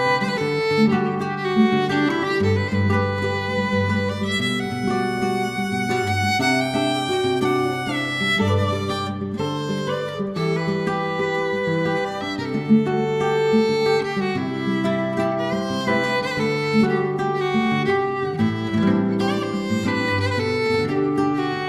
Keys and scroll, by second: 0.5 Delete, 1.1 ctrl+d, 1.2-2.1 typing, 3.1 5, 9.6 ctrl+c, 9.6 ctrl+v, 13.5 ctrl+c, 13.6 ctrl+v, 21.5 ctrl+c.